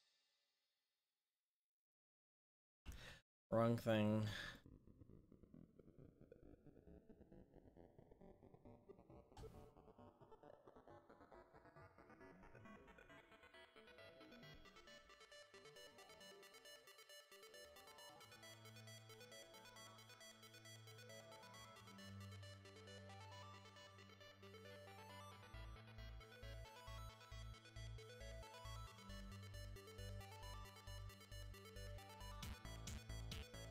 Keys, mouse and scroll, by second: 1.5-3.0 drag, 2.2 middle click, 3.0 ctrl+z, 4.9-5.5 drag, 5.1-5.7 middle drag, 8.9-12.4 middle drag, 17.5-18.6 middle drag, 19.3-23.8 drag, 23.4-28.0 middle drag, 23.4-23.8 right drag, 27.1 ctrl+z, 27.6 ctrl+z, 28.0 ctrl+z, 28.6 ctrl+z.